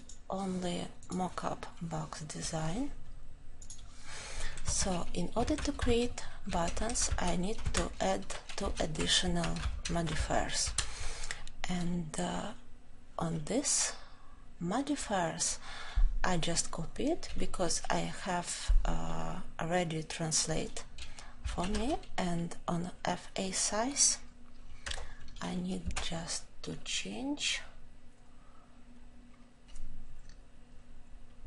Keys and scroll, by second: 21.5 ctrl+;, 24.8 ctrl+;.